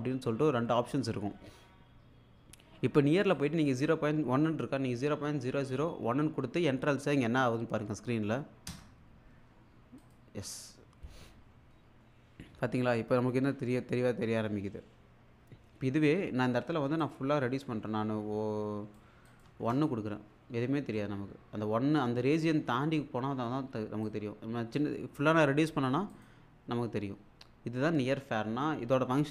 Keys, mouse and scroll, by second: 3.3 click, 10.0 click, 13.4-13.8 scroll up 1, 14.7 scroll down 1, 17.0-19.2 drag, 19.5 1, 19.7 click, 20.7-21.2 scroll down 1, 24.1-25.9 drag, 26.9 scroll up 1.